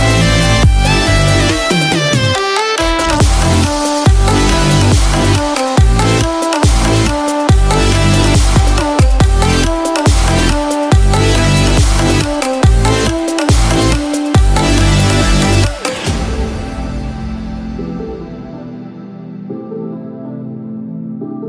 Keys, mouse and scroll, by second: 2.6 scroll down 2, 2.7 middle click, 3.4 g, 6.7 click, 9.0 scroll up 2, 9.6 shift+middle click, 9.6 scroll up 3, 12.4 g, 16.6-17.1 scroll down 1, 17.4 shift+middle click, 17.4 scroll down 5, 17.9 middle click, 19.8 click, 20.7 i.